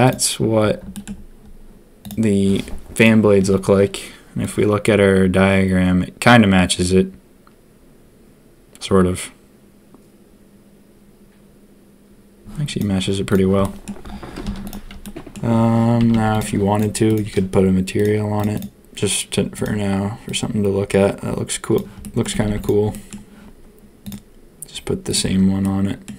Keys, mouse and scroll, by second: 0.0 click, 0.9 shift+click, 13.6 click, 14.4 z, 15.0 drag, 16.0 a, 16.1 a, 16.3 click, 16.7 click, 17.9 click, 18.3 click, 22.0 click, 22.4 a, 22.4 a, 22.6 click, 22.9 click, 24.0-25.3 drag, 25.6 click.